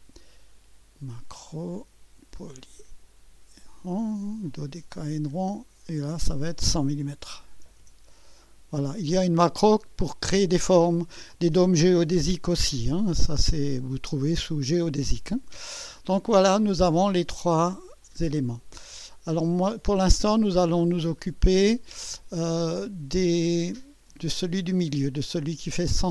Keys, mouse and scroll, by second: 2.6 click, 4.9 click, 6.1 click, 7.0-8.1 typing, 9.7 click, 13.6-14.9 drag, 18.0 click, 18.9 click, 20.2-21.3 drag.